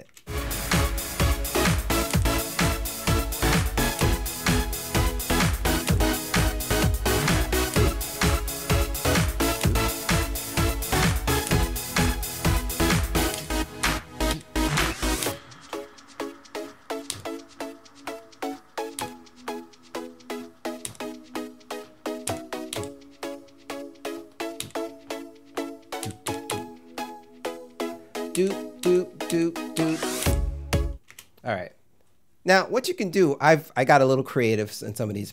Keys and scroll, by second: 0.0 space, 2.1 m, 4.0 m, 5.9 m, 7.7 m, 9.6 m, 11.5 m, 13.3 m, 17.1 m, 19.0 m, 20.9 m, 22.3 m, 24.6 m, 26.0 m, 28.4 m, 31.1 space.